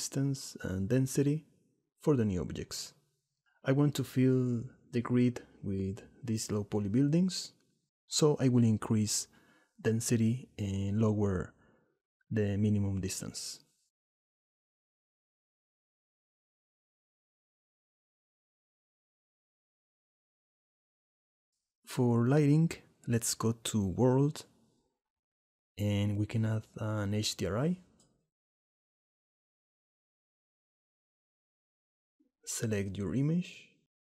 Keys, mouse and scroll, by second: 0.3 click, 1.1-2.5 middle drag, 3.1 shift+middle click, 5.0 click, 5.8 click, 10.1 shift+middle click, 11.0 shift+middle click, 11.9 shift+middle click, 13.0 shift+middle click, 13.9 shift+middle click, 14.7 shift+middle click, 15.1 shift+middle click, 15.4 middle click, 15.5 click, 15.8 middle click, 16.1 middle click, 16.2 click, 17.4 shift+middle click, 17.8 click, 17.8 middle click, 22.1 middle click, 25.5-30.7 drag.